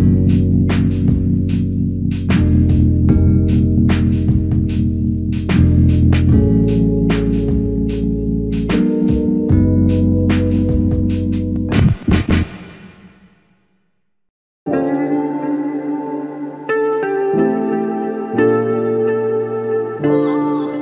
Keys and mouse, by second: 3.7 space, 4.7 space, 12.1 shift+click, 16.1 double click, 19.5 shift+click.